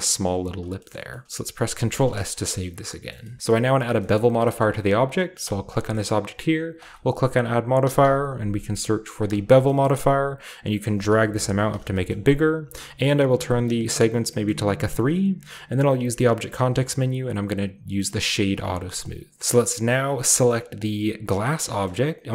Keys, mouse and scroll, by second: 0.2-0.6 scroll down 2, 0.7 middle drag, 1.0 shift+middle drag, 1.7 ctrl+s, 1.9 middle click, 2.1 shift+middle click, 2.3 middle drag, 2.3 scroll down 1, 2.3 a, 3.0 scroll down 1, 3.1 middle click, 3.1 scroll up 1, 3.3-3.9 middle drag, 3.4-3.9 scroll down 1, 3.4 a, 3.9-4.4 scroll down 1, 4.1 middle click, 4.6-5.5 middle drag, 4.6-5.4 scroll up 1, 5.4 right click, 5.4-6.0 scroll up 2, 5.5 typing, 6.7 click, 7.8 typing, 9.1 click, 9.6-11.6 shift+middle drag, 9.8-10.8 shift+scroll up 1, 10.8 shift+scroll up 1, 11.8-12.2 shift+scroll down 1, 11.9-13.6 shift+middle drag, 12.2 typing, 12.2-13.6 scroll up 1, 13.6 click, 14.2-15.9 middle drag, 14.6-15.9 scroll down 1, 15.9 typing, 16.1-17.4 scroll down 1, 17.5 click, 18.2-18.7 scroll down 1, 18.7-19.9 typing, 18.9-21.3 middle drag, 19.4-20.0 alt+shift+scroll up 1, 20.0-21.3 shift+scroll up 1, 21.1-21.9 typing, 21.3 click, 21.4 shift+right drag.